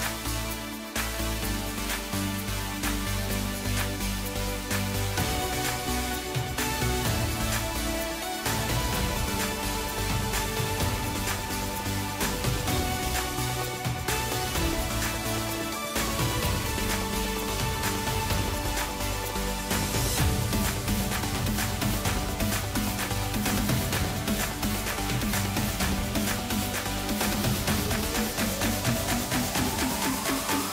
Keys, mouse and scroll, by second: 0.0-1.9 drag, 2.2-5.2 drag, 5.2-6.1 middle drag, 6.1 scroll up 1, 7.1-10.0 drag, 10.0-11.6 middle drag, 11.6-12.4 right drag, 12.4-14.0 middle drag, 14.0 click, 14.6-15.5 right drag, 15.5 scroll down 2, 15.8-16.8 middle drag, 16.8-17.7 scroll down 7, 17.7-18.1 scroll up 1, 18.5 ctrl+KP_2, 18.7 ctrl+KP_2, 18.9 ctrl+KP_2, 19.1-19.5 ctrl+KP_2, 20.2-20.7 scroll up 3, 20.7-21.7 middle drag, 21.7 alt+scroll down 1, 21.9-23.4 middle drag, 23.4-23.8 scroll up 1, 23.8-25.4 middle drag, 25.4 scroll up 2, 26.5 ctrl+KP_8, 26.7 ctrl+KP_8, 26.8 ctrl+KP_8, 28.2 scroll down 1, 29.7 ctrl+alt+KP_0.